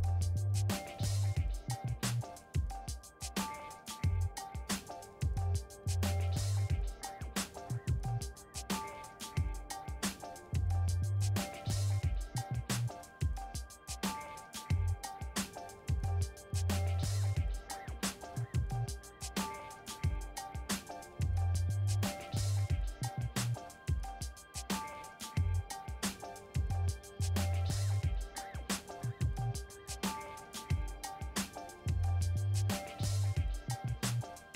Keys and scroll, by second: 18.5 a, 19.1 5, 20.9 0, 23.2 2.